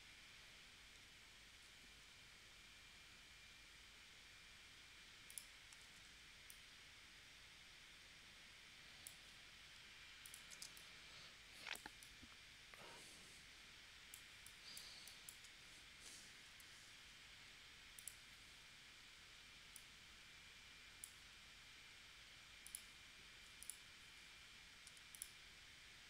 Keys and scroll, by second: 5.8 shift+c, 10.7 space, 16.5 p, 24.9 a.